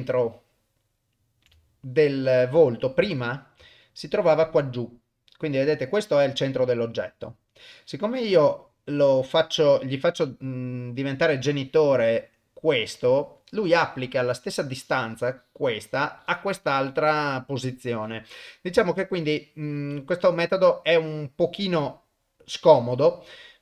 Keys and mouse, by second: 0.5 ctrl+middle click, 1.6 shift+middle click, 3.0 ctrl+z, 10.9 click, 19.8 ctrl+z.